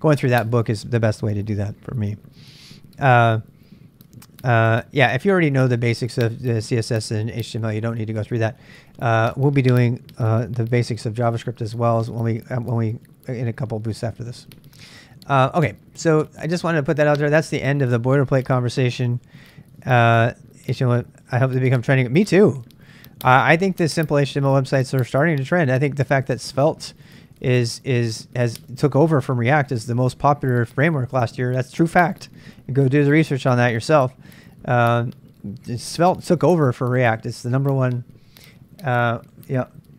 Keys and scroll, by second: 23.4 super+Tab, 27.6 super+Tab.